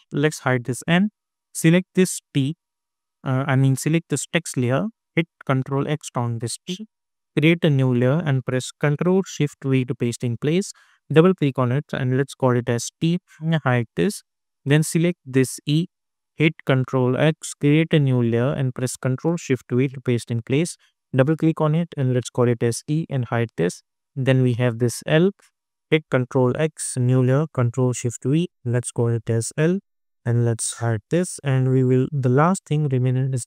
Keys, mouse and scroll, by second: 5.8 ctrl+x, 7.7 click, 9.6 ctrl+shift+v, 11.1 click, 12.0 t, 12.7 Return, 13.4-17.1 drag, 17.1 ctrl+x, 18.4 click, 19.6 ctrl+shift+v, 21.1 click, 21.4 e, 22.2 Return, 23.0-26.0 drag, 26.0 ctrl+x, 27.0 click, 27.8 ctrl+shift+v, 28.7 click, 29.6 l, 29.8 Return, 30.1-31.0 scroll down 1, 31.2 click.